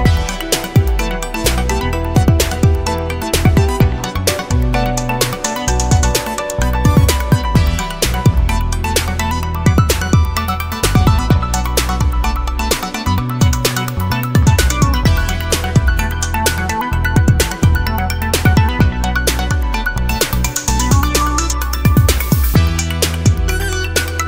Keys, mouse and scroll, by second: 0.2 click, 1.3 click, 1.9 click, 4.6 click, 6.4 click, 7.0 click, 7.9 click, 9.8 Escape, 10.2 right click, 11.2 Escape, 12.3-13.5 scroll up 1, 13.5-14.1 scroll up 1, 13.5 0, 14.1 scroll up 1, 14.4 1, 15.8 click, 16.8 click, 17.3 click, 18.5-20.4 drag, 20.7-21.2 scroll up 2, 23.5 click, 24.0 click.